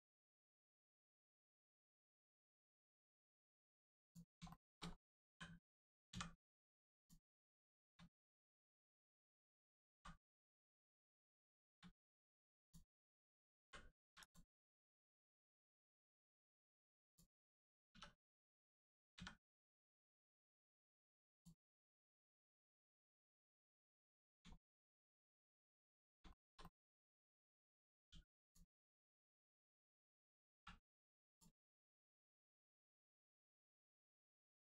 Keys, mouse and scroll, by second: 0.4 middle click, 1.1 click, 2.3 middle click, 3.0-3.8 scroll up 1, 4.0 click, 4.5 shift+middle click, 4.9 scroll up 1, 5.3 l, 6.1 x, 6.9 click, 7.4 shift+middle click, 8.7 click, 9.0 middle click, 9.9 x, 10.6 click, 11.3 shift+middle click, 12.6 click, 12.6 click, 13.6 l, 14.2 click, 14.8 middle click, 15.6 scroll down 1, 16.0 middle click, 17.0 click, 17.9 3, 18.2 click, 19.1 x, 21.3 click, 21.9 middle click, 24.5 shift+middle click, 24.7 middle click, 25.4 scroll down 1, 25.6 middle click, 26.0 scroll down 1, 26.3 shift+middle click, 26.6 middle click, 26.7 middle click, 28.1 2, 28.4 click, 28.9 middle click, 30.5 1, 31.3 click, 31.6 middle click, 33.5 shift+middle click, 33.8 scroll down 1, 34.1 middle click.